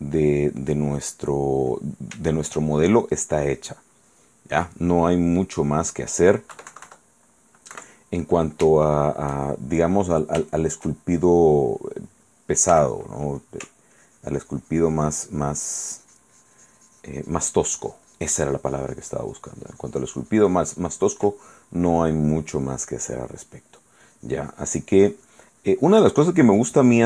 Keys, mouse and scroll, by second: 0.7-1.7 drag, 2.2 click, 2.4-3.7 shift+drag, 4.1 click, 4.8-5.7 scroll up 1, 5.7 click, 6.7 KP_Subtract, 7.9 KP_Subtract, 8.9-11.1 shift+middle drag, 11.2 shift+middle click, 12.9 f, 13.6 ctrl+click, 14.1-21.5 ctrl+drag, 21.6-23.8 ctrl+middle drag, 24.2-27.0 drag.